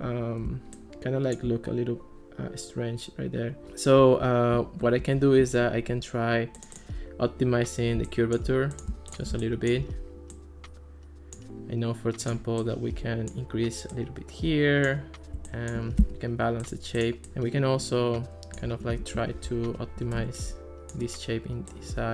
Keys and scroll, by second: 5.0 alt+r, 16.0 Escape, 19.2 alt+r.